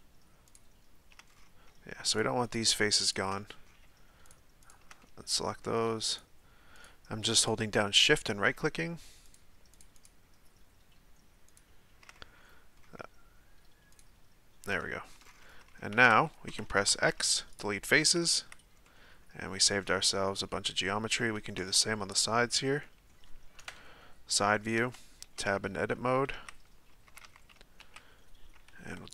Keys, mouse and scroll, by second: 0.5 shift+right click, 1.3-1.7 scroll up 1, 2.1 shift+right click, 3.0 shift+right click, 3.4-4.3 middle drag, 4.3 shift+right click, 4.6 shift+right click, 5.0-6.1 middle drag, 6.1 shift+right click, 6.8 shift+right click, 7.4 shift+right click, 8.1-9.2 shift+middle drag, 9.2 shift+right click, 9.7 shift+right click, 9.9 shift+right click, 11.5 shift+right click, 12.1-13.9 middle drag, 13.9 shift+right click, 14.8-15.2 middle drag, 15.2-15.6 scroll down 6, 16.1 z, 17.6 x, 18.5 z, 18.8-19.6 middle drag, 19.6-20.2 scroll up 1, 20.2 scroll down 1, 20.5-21.6 middle drag, 21.6 Tab, 22.1 right click, 22.8-23.7 middle drag, 23.7 KP_3, 24.7 Tab, 26.5 z, 27.0 a, 27.2 a.